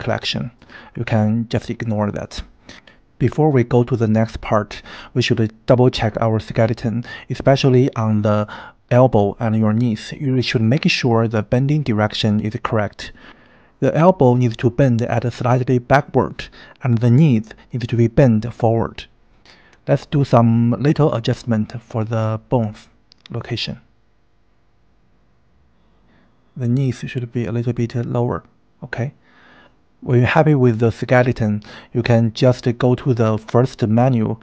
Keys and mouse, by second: 14.7 KP_1, 15.7 KP_3, 18.5-19.5 shift+middle drag, 21.5 click, 22.0 g, 24.4 g, 26.1 click, 26.3 g, 30.1 KP_1, 31.3 shift+middle click.